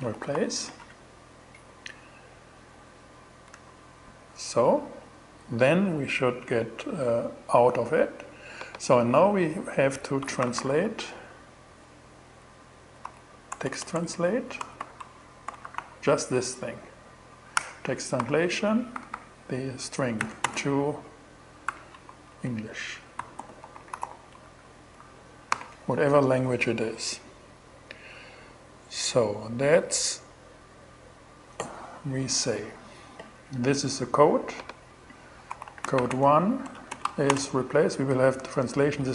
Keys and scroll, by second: 0.0-0.6 typing, 3.0 shift+Return, 9.6-10.6 typing, 12.0-15.7 typing, 17.0 Return, 17.6 alt+5, 18.4 alt+Right, 20.1-24.4 typing, 24.4 alt+shift+2, 25.0 alt+shift+6, 34.7-36.5 typing, 37.6 space.